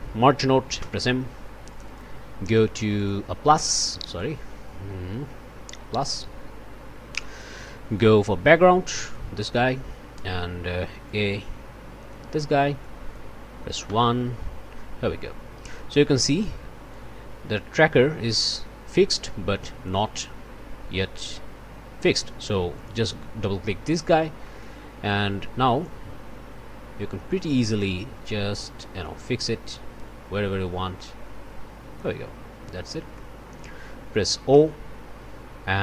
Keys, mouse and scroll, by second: 0.8 m, 1.7 click, 2.9 click, 4.2-6.2 drag, 7.9-9.3 drag, 11.0-12.3 drag, 12.8 click, 13.9 1, 16.9-20.1 drag, 22.7 click, 23.2-24.0 scroll up 1, 24.0 scroll down 1, 24.4 click, 25.8-32.2 drag, 32.8 middle click, 33.1 click, 34.5 o.